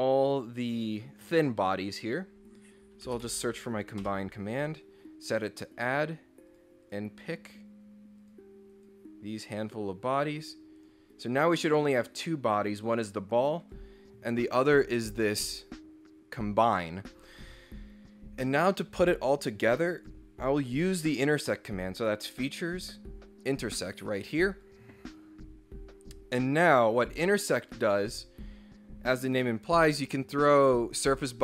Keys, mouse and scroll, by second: 2.0 click, 2.8-3.9 typing, 4.0 Return, 5.9 click, 6.5 click, 6.8 click, 8.2 click, 8.7 click, 10.1 right click, 10.8 click, 12.5 click, 13.6 click, 20.0 click, 24.5 click, 27.4 click, 28.1 click.